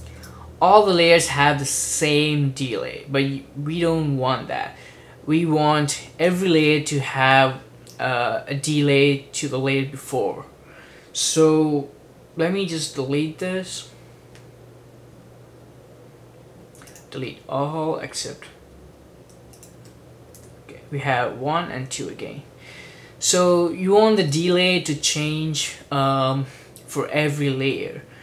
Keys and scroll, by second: 0.1 super+d, 20.5 BackSpace.